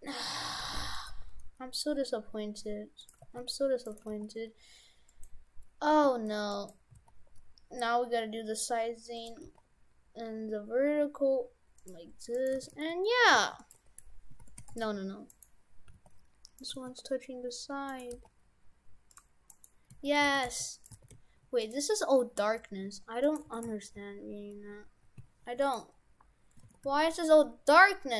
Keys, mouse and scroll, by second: 0.5 g, 1.1 g, 3.2 g, 4.0 g, 5.9 g, 6.9 s, 10.0 g, 12.4 right click, 12.6 shift+f, 13.8 Tab, 14.4 shift+f, 14.9 Tab, 15.4 right click, 15.9 g, 16.8 g, 18.1 g, 19.6 right click, 20.0 Tab, 20.3 shift+f, 21.0 shift+f, 22.5 Tab, 22.9 Tab, 23.3 right click, 23.5 shift+f, 26.7 shift+f.